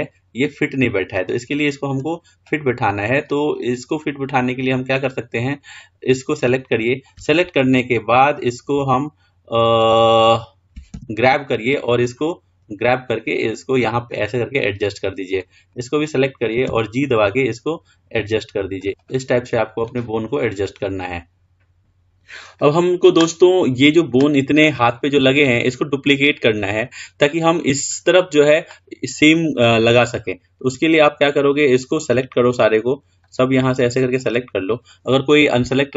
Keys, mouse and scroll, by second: 2.1 click, 3.5-5.1 middle drag, 5.1 click, 15.6 click, 16.9 g, 20.1-22.1 middle drag, 32.9 click.